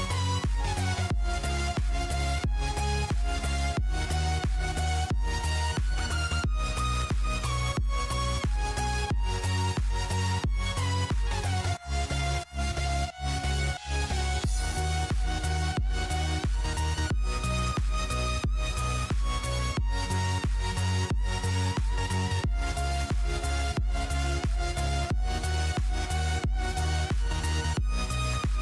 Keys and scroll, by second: 4.1-5.6 typing, 6.6-8.7 typing, 6.9 Tab, 10.1-11.0 typing, 12.7-18.4 typing, 20.2-21.2 typing, 22.9-26.3 typing, 27.7-28.6 typing.